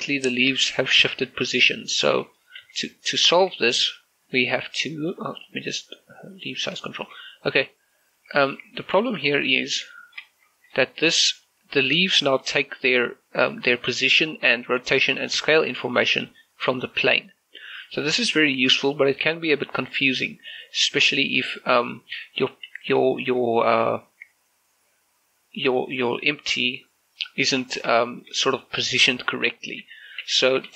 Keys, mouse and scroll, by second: 1.2 ctrl+z, 1.9 shift+middle click, 2.6 ctrl+shift+z, 4.1 ctrl+z, 4.2 right click, 5.4 click, 7.0 shift+middle click, 8.8 scroll up 1, 9.2 shift+middle click, 9.4 scroll up 1, 9.7 z, 10.0 shift+middle click, 10.3-11.4 scroll up 1, 11.4 right click, 12.4 scroll down 1, 13.0 right click, 13.3 scroll down 1, 13.5 middle click, 14.2 z, 14.4 scroll down 1, 14.6 shift+middle click, 15.2 shift+middle click, 15.7 g, 17.9 right click, 19.3-23.2 drag, 19.8-22.4 drag, 23.2 shift+middle click, 23.6 scroll up 1, 25.8 shift+middle click, 27.2 click, 28.0 scroll down 1, 28.0 shift+middle click, 28.2 shift+middle click, 28.9 click, 29.9 ctrl+z.